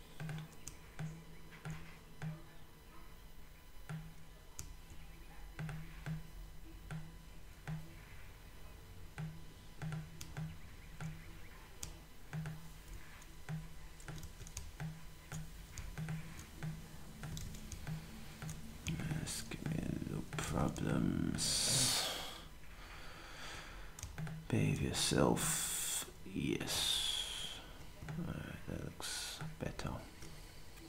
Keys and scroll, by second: 17.4 z, 20.4 z, 21.7 typing, 24.0 typing.